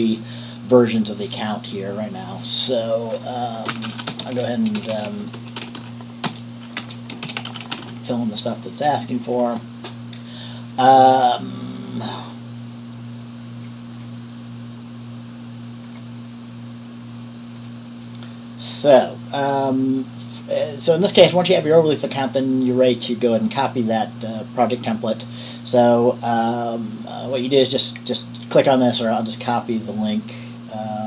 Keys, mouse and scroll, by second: 2.7-4.1 drag, 3.8-8.5 typing, 8.6 click, 9.4 click, 16.0 click, 17.7 click, 25.6 click.